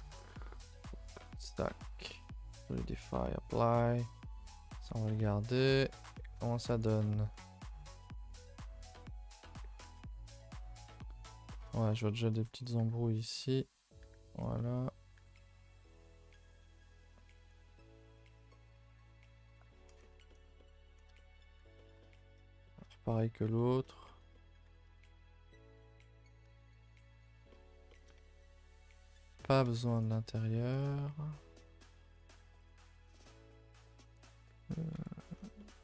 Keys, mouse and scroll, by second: 0.0-0.3 scroll up 1, 0.5 shift+middle click, 1.2-4.9 drag, 5.2 middle click, 5.4 scroll up 2, 5.6 Tab, 5.8 middle click, 6.7 scroll up 1, 7.0-8.7 middle drag, 8.7 Tab, 8.7-9.8 middle drag, 9.8 ctrl+i, 10.0 h, 10.2 Tab, 10.5-10.9 scroll up 3, 10.9 middle click, 11.6 scroll up 2, 11.9 1, 12.0 middle click, 12.6 click, 12.8 g, 14.0 click, 14.0 g, 14.5 middle click, 15.1 g, 15.7 middle click, 16.5 click, 16.6 g, 17.0 middle click, 17.4 scroll down 2, 17.6 middle click, 18.3 scroll down 2, 18.5-21.5 middle drag, 21.5 scroll up 2, 21.7-22.8 shift+middle drag, 22.8-23.2 scroll up 1, 23.2 alt+click, 23.5-24.6 middle drag, 24.6 r, 25.8 middle click, 26.3 s, 27.5 middle click, 28.2 a, 28.3 a, 28.6 3, 29.4 alt+click, 30.0 x, 30.5 scroll down 2, 30.7 middle click, 31.4 scroll up 2, 31.6 middle click, 32.2-32.6 scroll up 1, 32.6 alt+click, 33.1 x, 34.9 l, 35.3 scroll down 2, 35.5-35.8 middle drag.